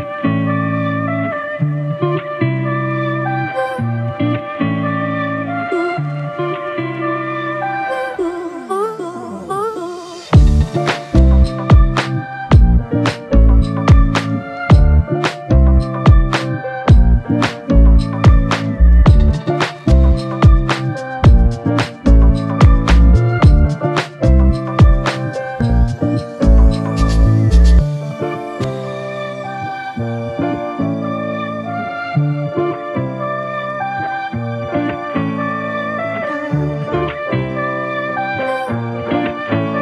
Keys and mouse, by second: 5.3 double click, 13.2 double click, 19.4 ctrl+click, 25.4 ctrl+i, 28.8 g, 36.7 alt+m, 38.8 shift+click.